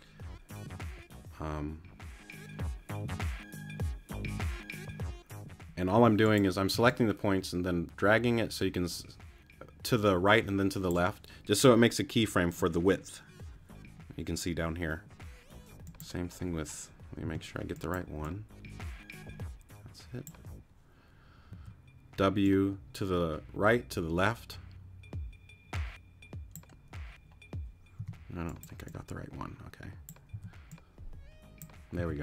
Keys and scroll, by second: 6.0 t, 6.7 w, 17.2 t, 21.5 w, 28.0 t, 30.3 w, 32.0 t.